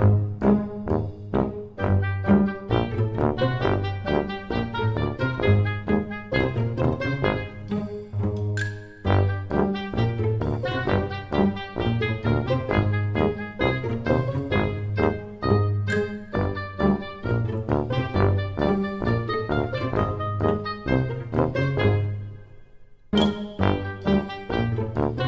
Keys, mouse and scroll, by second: 8.8 middle click, 10.6-11.4 scroll up 3, 11.4 middle click, 15.3 s, 24.7 middle click.